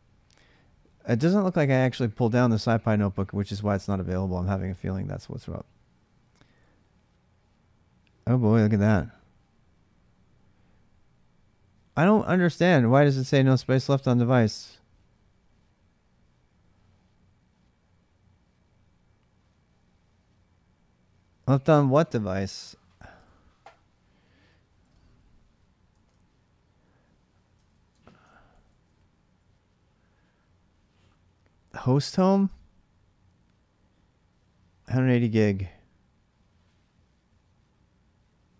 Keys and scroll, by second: 22.6-25.7 typing, 25.9 Return, 27.3-29.1 typing.